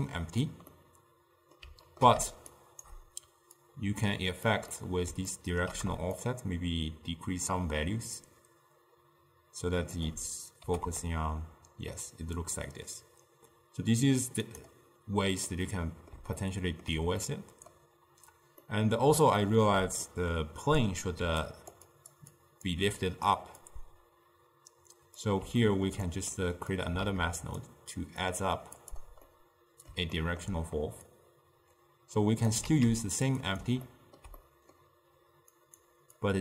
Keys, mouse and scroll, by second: 0.7 scroll down 1, 0.8-2.6 middle drag, 2.6 shift+right click, 3.7 click, 4.8 middle click, 5.4 ctrl+middle click, 6.3-9.5 shift+drag, 10.7 g, 15.6-21.3 middle drag, 21.3-22.8 typing, 21.5 click, 22.0 click, 22.5 click, 23.7 click, 25.7-26.8 ctrl+middle drag, 26.8 click, 27.1 shift+d, 28.3-29.3 drag, 29.3-31.2 middle drag, 31.2 click, 32.8 shift+d, 33.9-35.7 ctrl+middle drag, 35.7 click, 36.3-36.4 drag.